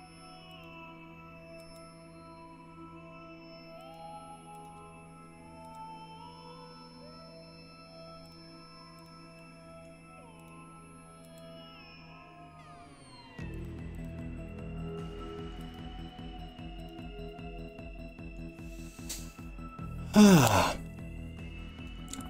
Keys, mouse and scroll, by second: 0.5 click, 1.6 g, 3.8 click, 4.6 click, 5.7 g, 8.4 click, 9.0 click, 9.4 middle click, 10.4 click, 11.3 g, 13.6 click, 14.0 click, 14.2 middle click, 15.1 middle click, 15.6 g, 16.8 click, 17.0-18.2 middle drag, 18.2 click, 18.7 middle click.